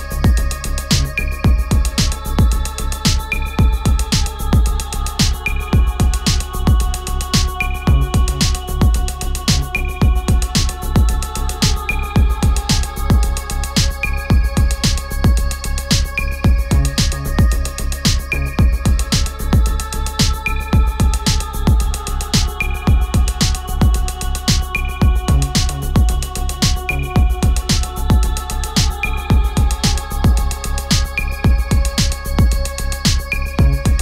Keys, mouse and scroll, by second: 4.9 space, 5.6-9.1 drag, 16.9 click, 21.3-24.5 drag.